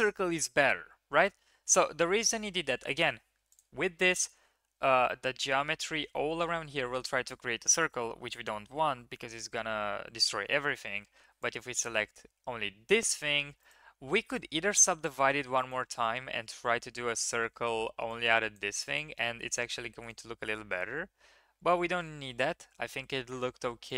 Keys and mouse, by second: 2.3 ctrl+z, 2.5 ctrl+z, 3.2 1, 3.5 click, 10.9 3, 11.5-13.9 drag, 15.5-17.1 drag, 17.6-18.5 drag, 22.0 ctrl+z, 22.4 ctrl+z, 23.1 ctrl+z.